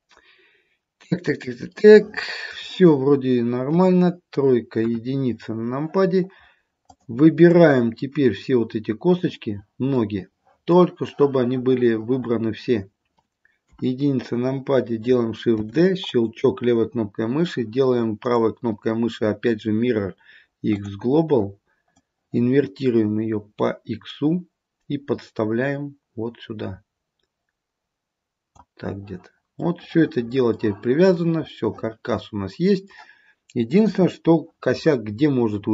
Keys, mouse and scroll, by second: 1.9 middle click, 3.9 KP_3, 4.9 KP_1, 5.6-6.8 scroll down 1, 7.0 click, 7.6 click, 10.1 middle click, 13.7 KP_1, 15.7 shift+d, 18.3 right click, 22.0 click, 29.8 middle click, 31.2 middle click, 34.0 KP_3.